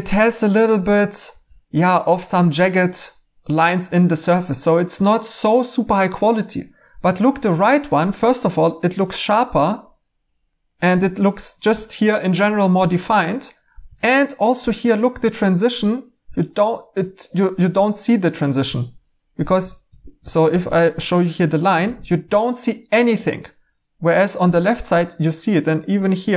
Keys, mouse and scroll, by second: 1.3 3, 6.3 typing, 19.2-20.5 typing, 21.8 e.